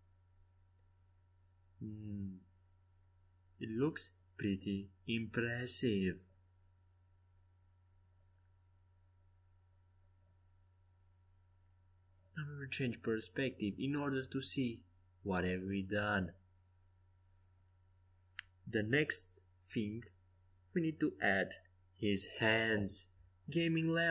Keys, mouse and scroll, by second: 0.2-3.0 typing, 4.6-15.6 typing, 17.3-18.4 middle drag, 18.9 KP_5, 20.9 z, 23.0-24.1 middle drag.